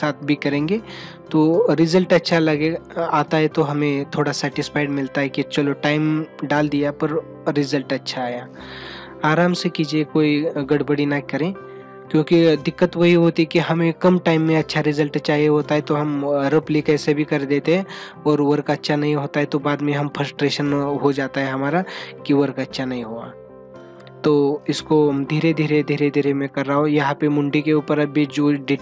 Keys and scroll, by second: 0.2 ctrl+alt+z, 7.4 ctrl+alt+z.